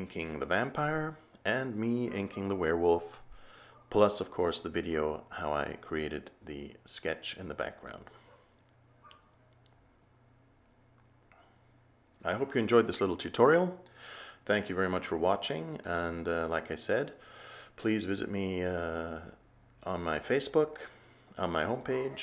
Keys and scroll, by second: 2.3 a, 17.0 a.